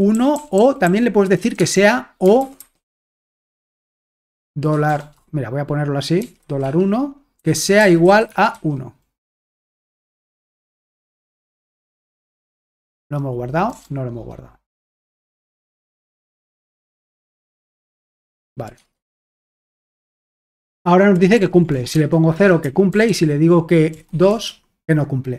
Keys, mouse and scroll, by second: 0.0-4.9 typing, 6.0-10.0 typing, 10.5 Escape, 12.1-13.7 typing, 15.1-16.1 typing, 17.6-18.3 typing, 18.9 alt+Tab, 19.9 ctrl+p, 20.4 Return, 21.3 ctrl+p, 21.7 BackSpace, 21.9 0, 22.9 Return, 22.9 c, 23.9 ctrl+p, 24.1 c.